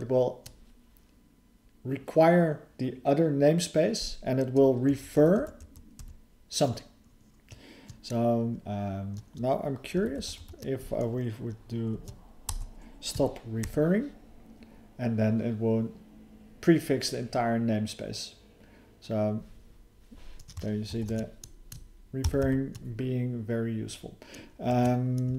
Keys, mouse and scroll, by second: 4.9 alt+f, 5.2 alt+f, 5.4 alt+f, 5.6 alt+f, 6.0 alt+f, 10.0 alt+b, 10.2 alt+b, 10.4 alt+b, 20.9 ctrl+_.